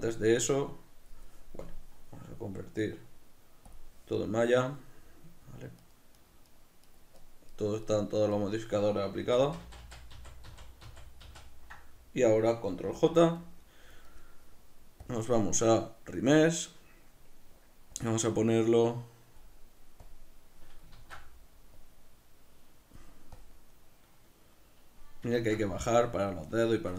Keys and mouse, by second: 1.7-4.9 drag, 4.9-5.9 middle drag, 5.9-9.3 right drag, 9.3 ctrl+z, 13.6-15.1 middle drag, 15.1 click, 18.0-26.8 drag, 21.0 ctrl+z, 25.4 ctrl+z, 26.8-26.9 shift+middle drag.